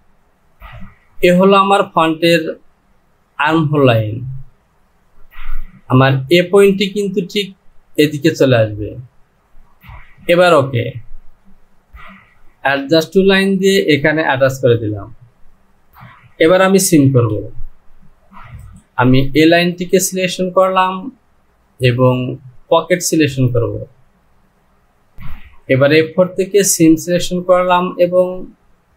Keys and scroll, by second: 17.2 Home.